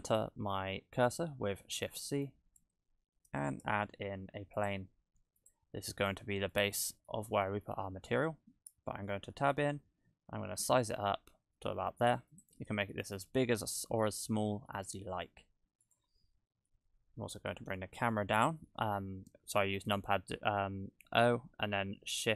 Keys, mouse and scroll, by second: 1.9 shift+c, 3.6 shift+a, 5.8-6.5 scroll down 3, 6.5 middle click, 6.5-6.8 scroll down 1, 7.6-8.6 scroll down 1, 9.0 Tab, 9.4 a, 9.8 s, 12.7 Tab, 14.0 middle click, 15.8 right click, 16.9 KP_0, 17.8 shift+`.